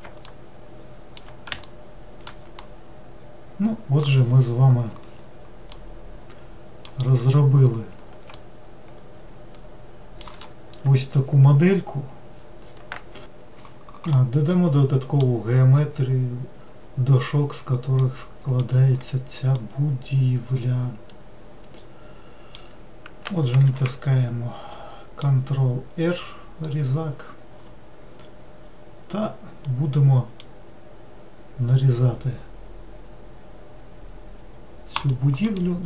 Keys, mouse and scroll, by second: 5.8-7.3 middle drag, 7.3-8.4 scroll up 1, 8.4-11.4 shift+middle drag, 14.1-17.2 middle drag, 18.0-19.0 middle drag, 19.0-19.6 scroll up 1, 19.6-22.6 middle drag, 23.7 ctrl+r.